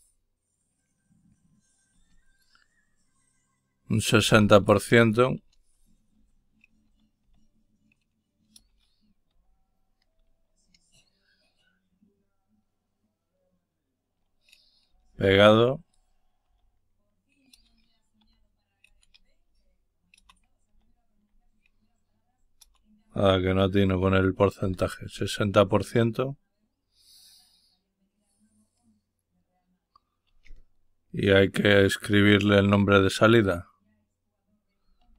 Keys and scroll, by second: 3.9-4.8 typing, 6.2-7.2 typing, 8.6-9.3 typing, 16.5 shift+7, 18.2 /, 20.7 shift+7, 24.7 shift+5, 34.6-35.1 typing.